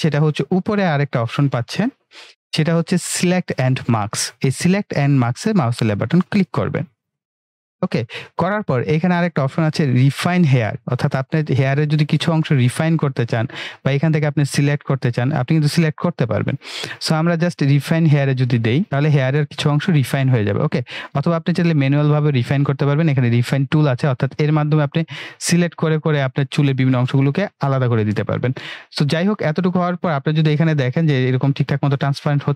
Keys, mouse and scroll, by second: 7.0 click, 18.5 click, 24.7 click, 31.1-32.5 drag.